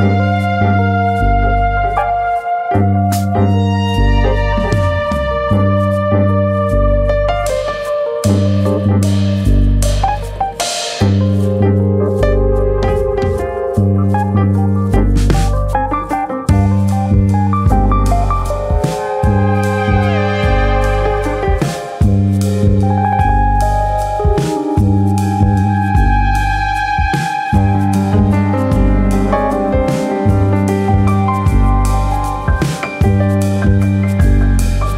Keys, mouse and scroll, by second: 2.1 middle click, 2.7 Tab, 3.2 ctrl+Tab, 5.1 middle click, 5.4 KP_3, 6.5 click, 7.2 click, 9.2 click, 9.9 ctrl+z, 10.6 click, 11.5 click, 12.5 click, 13.8 click, 14.8 click, 17.0 ctrl+z, 17.0 click, 17.2 click, 17.8 middle click, 18.4 middle click, 19.1 middle click, 19.3 shift+middle click, 20.2 click, 21.3-21.7 scroll up 2, 21.6 middle click, 22.5 click, 23.3 ctrl+z, 23.3-23.8 scroll up 2, 23.5 shift+middle click, 23.8 middle click, 24.3 click, 25.1 ctrl+z, 25.2 middle click, 25.6 middle click, 26.0 shift+middle click, 26.5 click, 27.5 middle click, 28.0-28.6 scroll up 2, 28.3 middle click, 29.2 click, 29.8 ctrl+z, 29.9-30.3 scroll down 1, 30.5 scroll down 2, 30.6 middle click, 31.0 shift+middle click, 31.2 middle click, 31.6 shift+click, 31.8 shift+click, 32.2 middle click, 32.5 scroll down 2, 32.7 middle click, 33.0 middle click, 33.1 shift+middle click, 33.8 shift+click, 34.3 shift+middle click, 34.6 shift+middle click.